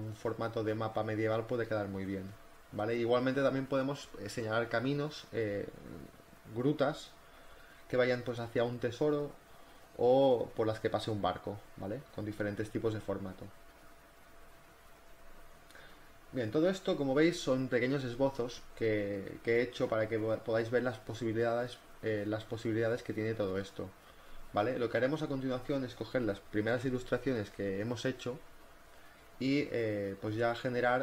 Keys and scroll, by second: 0.1 space, 0.8 space, 2.1 ctrl+t, 2.5 Return, 2.6 z, 2.7 space, 2.9 b, 3.6 ], 5.5 [, 8.3 ], 10.6 [, 11.9 ctrl+z, 14.6 z, 14.9 space, 16.0 ctrl+t, 16.8 Return, 17.8 v, 20.9 z.